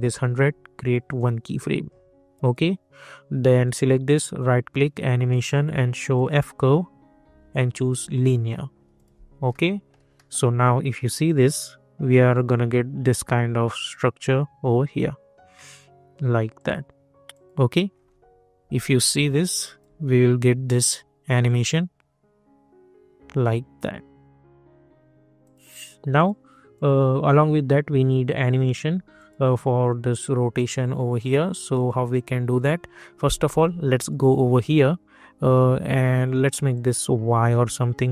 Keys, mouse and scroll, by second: 0.8 click, 4.2 right click, 6.1 click, 9.5 middle click, 11.2 click, 16.5 click, 17.8 scroll down 1, 19.2-20.6 alt+drag, 25.4 click, 31.7 click, 36.7 click.